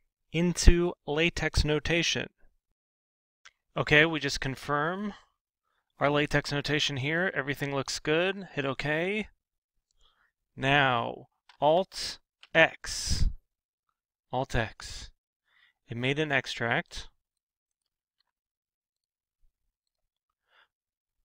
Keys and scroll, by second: 12.3 alt+x, 18.0 alt+c.